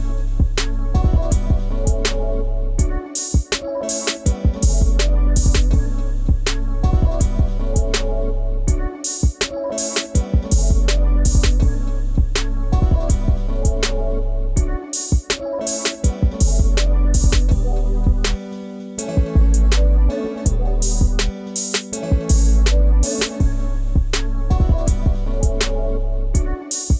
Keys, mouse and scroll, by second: 1.4 double click, 3.6 double click, 5.5 double click, 6.1-6.5 scroll down 1, 6.5-6.9 scroll up 1, 6.9 scroll down 1, 7.1 ctrl+space, 7.2 ctrl+click, 7.4 ctrl+space, 12.0 double click, 12.2-12.7 scroll down 1, 12.7 space, 12.9 ctrl+click, 20.2 scroll up 1, 20.5 space, 20.6 ctrl+click, 21.6-22.0 ctrl+scroll down 1, 26.6 scroll, 26.7 scroll down 1, 26.9 space.